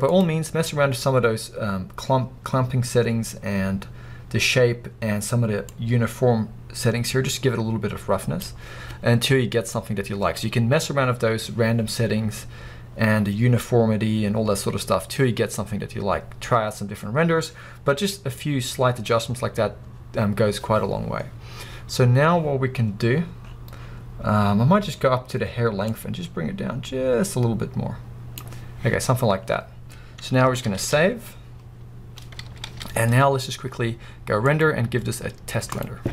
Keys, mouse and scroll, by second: 9.7-10.6 scroll up 2, 10.6-11.3 scroll up 1, 11.3-12.3 scroll up 1, 12.3-13.1 scroll up 1, 13.1-14.0 scroll up 1, 14.0-14.8 scroll up 1, 19.1-19.4 scroll up 1, 19.4-20.6 scroll down 2, 26.8 click, 29.7 scroll down 1, 29.8-36.0 drag, 36.0 scroll down 1.